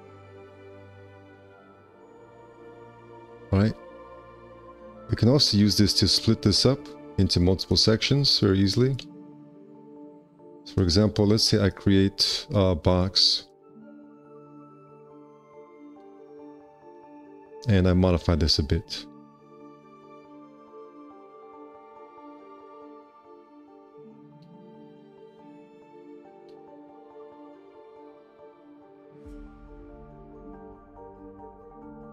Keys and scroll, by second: 2.8 alt+F4, 9.1 z, 17.4 1, 18.3 w, 20.1 4, 20.3 q, 21.6 w, 27.4 1, 29.6 4, 31.1 w.